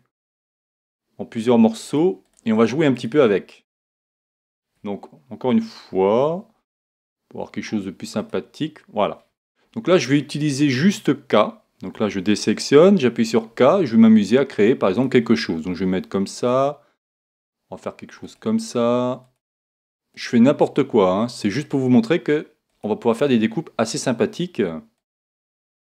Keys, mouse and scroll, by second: 1.9 click, 8.2 click, 11.9 a, 12.8 a, 12.8 k.